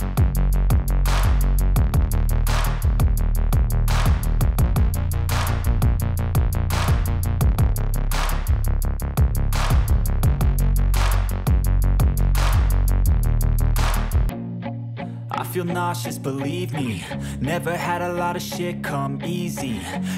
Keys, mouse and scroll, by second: 1.9 click, 3.4 click, 4.9 click, 6.6 click, 10.7 click, 12.6 click, 15.9 click, 17.1 click, 19.8 click.